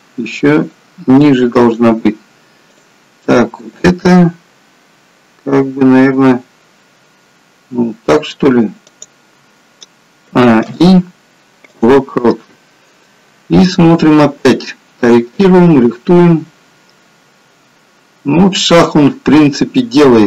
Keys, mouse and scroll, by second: 2.6 click, 3.5 g, 10.2 a, 10.7 i, 13.8 click, 15.6 click.